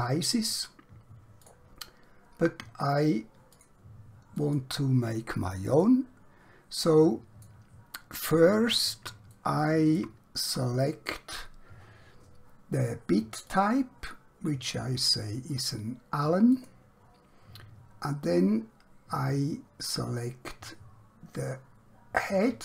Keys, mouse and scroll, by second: 1.4 click, 5.9 middle click, 8.1 scroll up 1, 8.3-9.1 scroll down 1, 9.3 shift+middle click, 13.4 click, 16.5 click, 22.2 click.